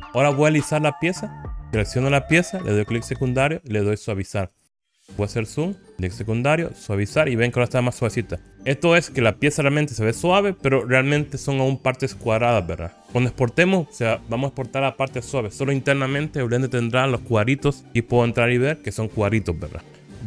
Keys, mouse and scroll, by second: 0.0 right click, 0.0 click, 1.6 click, 2.7 right click, 3.8 right click, 4.9 click, 8.3 right click, 17.8 Tab.